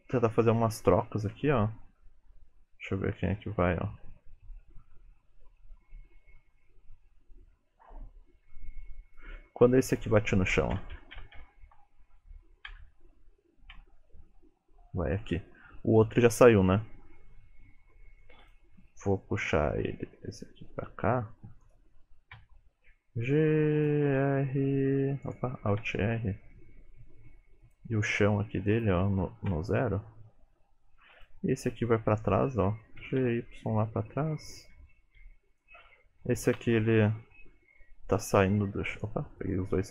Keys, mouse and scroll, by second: 10.6 Left, 10.8 Left, 11.0 Left, 11.2 Left, 11.4 Left, 11.9 Right, 12.8 Right, 13.8 Right, 18.5 click, 20.2 g, 22.4 KP_3, 23.3 g, 24.1 r, 25.8 alt+r, 26.2 g, 28.8 click, 31.2 click, 33.1 g, 35.6 shift+click, 36.5 shift+middle click, 38.4 r, 39.4 click.